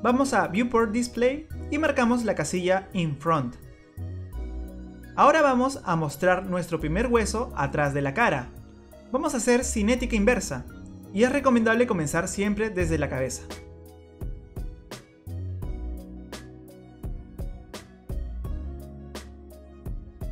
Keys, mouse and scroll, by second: 1.7 click, 2.2 scroll down 2, 3.1 click, 4.2-4.7 scroll up 2, 4.7 middle click, 8.4 click, 9.4 scroll down 3, 10.6 click, 10.6-11.3 scroll down 1, 11.6-12.3 scroll down 1, 12.3 click, 12.3 scroll down 1, 14.2 click, 14.8 middle click, 15.4 scroll up 2, 15.6 scroll down 1, 15.8 click, 16.0-16.3 scroll up 1, 16.3 click, 16.7 middle click, 17.1 click, 17.7 click, 18.3 scroll up 2, 18.5 scroll down 2.